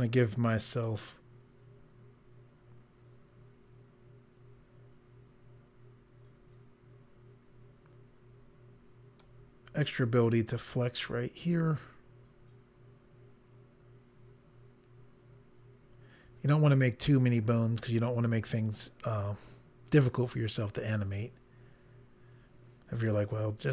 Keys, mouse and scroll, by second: 0.8 click.